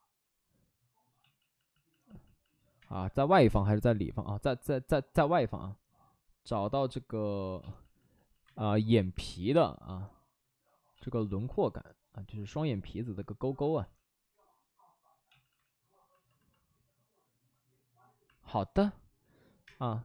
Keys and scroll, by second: 2.7 space, 3.5 space, 5.1 ctrl+z, 7.5 ctrl+z, 7.9 ctrl+z, 8.0 ctrl+z, 8.4 space, 10.9 ctrl+z, 11.4 ctrl+z, 13.5 ctrl+z, 19.6 space.